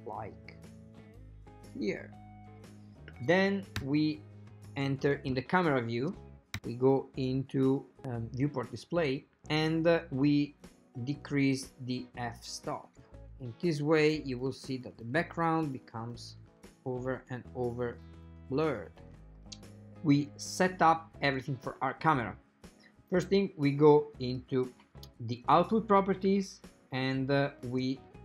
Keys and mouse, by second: 3.9 KP_0, 6.6 KP_0, 7.5 click, 11.3 click, 12.3 click, 13.1 click, 13.6 click, 14.2-15.7 drag, 15.9-17.8 drag, 18.0-19.2 drag, 24.4 click, 25.6 drag.